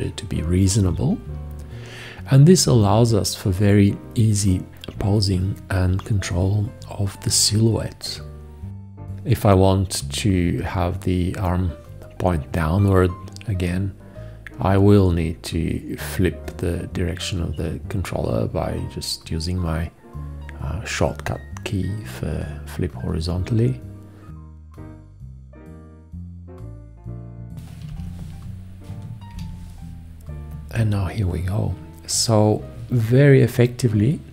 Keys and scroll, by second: 22.5 h, 27.9 shift+,, 29.3 shift+..